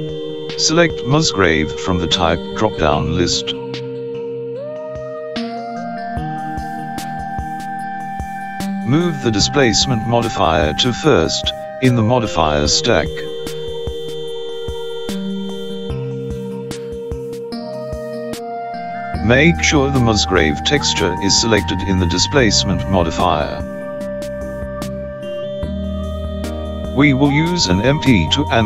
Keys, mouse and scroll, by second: 3.5 click, 9.3 click, 16.5 click.